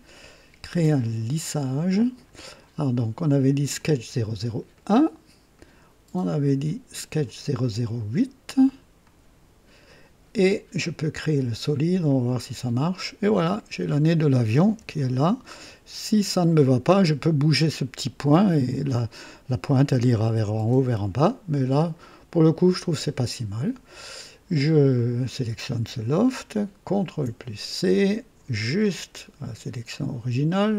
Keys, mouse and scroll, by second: 1.5 click, 3.7 click, 4.7 click, 5.5-6.1 drag, 7.2 click, 8.9 click, 11.1 click, 12.3 click, 13.5-14.0 drag, 14.7 KP_3, 15.3 right click, 21.1-21.6 scroll down 1, 21.8 scroll down 1, 24.8 click, 27.0 ctrl+c, 28.7 click.